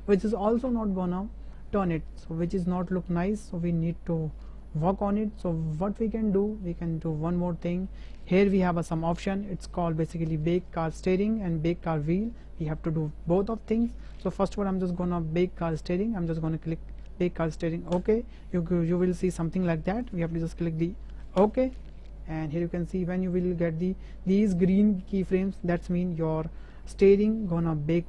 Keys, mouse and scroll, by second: 5.0-6.0 drag, 6.4 middle drag, 6.8 shift+middle drag, 7.6 shift+drag, 17.9-21.7 drag.